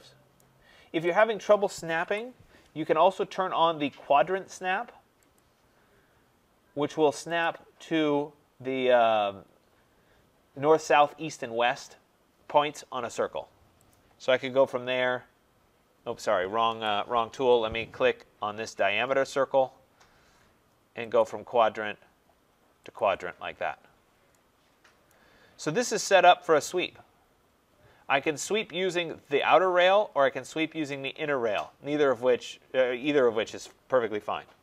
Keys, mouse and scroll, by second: 0.2 right click, 1.1 click, 1.9 Delete, 5.3 click, 7.3 click, 13.8 click, 16.6 Escape, 19.2 click, 21.1 click, 23.6 scroll, 25.0 right click, 25.4-27.9 scroll, 27.9-28.7 scroll, 29.3 click, 31.0 click.